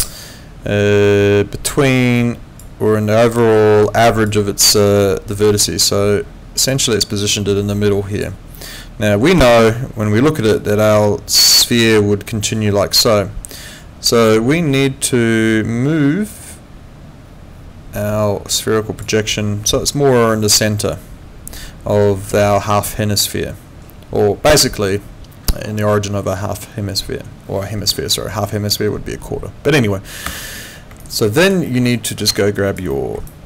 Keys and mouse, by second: 30.3 Escape, 31.0 alt+click, 31.7 alt+middle click, 31.9 alt+right click, 32.4 alt+click, 32.9 alt+middle click, 33.3 alt+click.